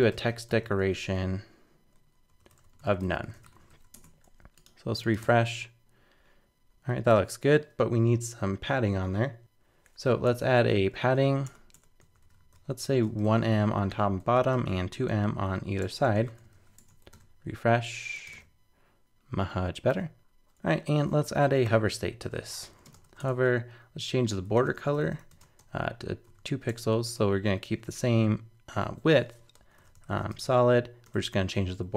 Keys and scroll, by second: 3.7 super+s, 3.9 super+Tab, 5.2 super+r, 9.4 super+Tab, 16.5 super+s, 16.8 super+Tab, 17.1 super+r, 19.9 super+Tab.